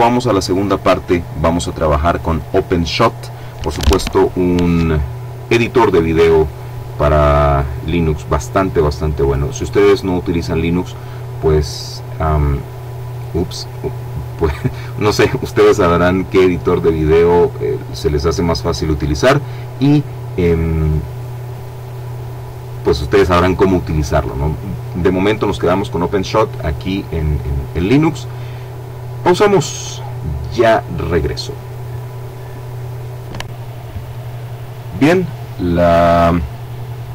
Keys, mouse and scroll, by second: 30.3 click, 32.0-34.0 drag.